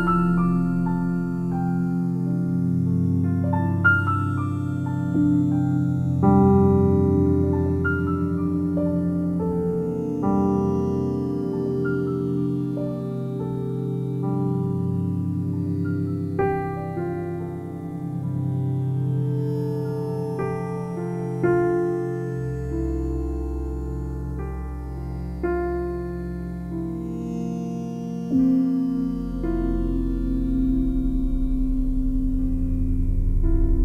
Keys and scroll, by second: 12.3 p, 22.7 i, 33.4 i.